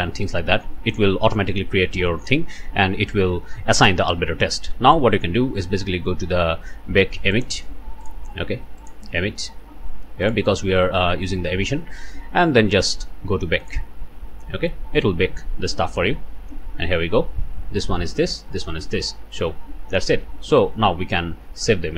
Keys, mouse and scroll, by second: 5.6-5.9 scroll up 1, 6.2 scroll up 1, 7.3 click, 8.0 click, 8.8 click, 10.2 click, 11.7-12.4 scroll down 1, 13.6 click, 18.3 scroll down 1, 19.0-19.4 scroll up 1, 19.8 scroll down 1.